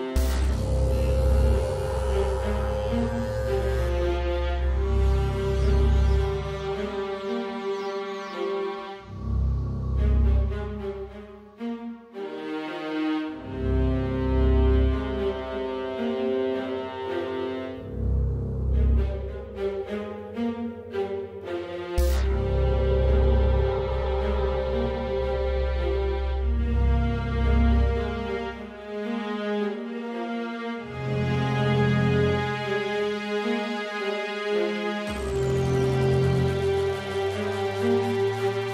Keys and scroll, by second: 2.3 super+a, 16.0 Left, 16.1 Left, 16.1 Left, 16.3 Left, 16.9 super+Up, 17.2 super+Up, 19.4-22.8 typing, 34.6 super+z, 36.1 Left, 36.1 Left, 36.2 Left.